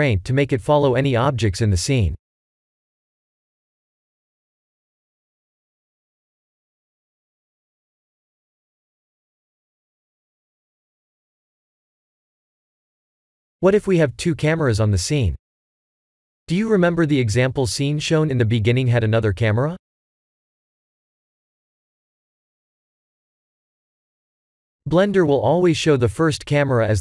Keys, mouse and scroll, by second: 1.0 click, 1.9-3.9 drag, 5.3-8.0 drag, 10.5 KP_0, 12.7 click, 15.7 click, 16.4 middle click, 16.8-17.1 middle drag, 19.0-20.0 middle drag, 22.6 s, 23.5 drag, 24.9 click, 25.5 click.